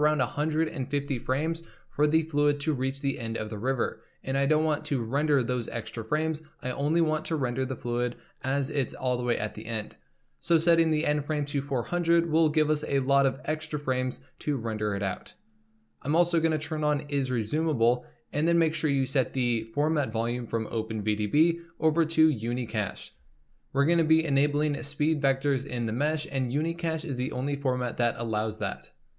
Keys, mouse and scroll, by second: 0.0 KP_0, 16.3 click, 20.0-23.6 drag.